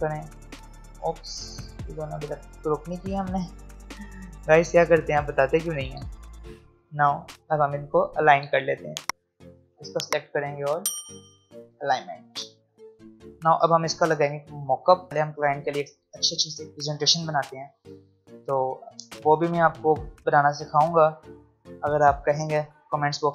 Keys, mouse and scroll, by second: 3.0 right click, 5.8 click, 8.5 shift+click, 9.7 click.